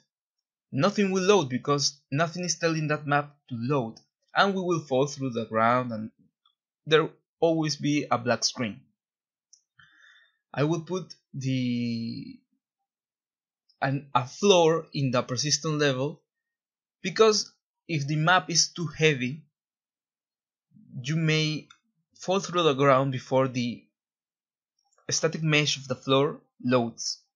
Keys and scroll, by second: 0.0-0.2 typing, 0.7 Escape, 3.8-4.7 typing, 8.2 ctrl+z, 21.6-23.2 typing.